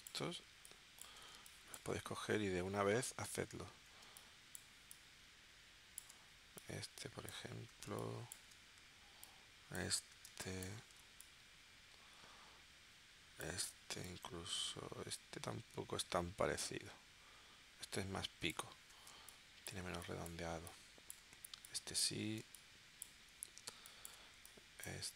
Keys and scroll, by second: 1.3 space, 4.0 space, 7.9 space, 10.3 space, 19.3 space, 22.4 space, 23.8 space.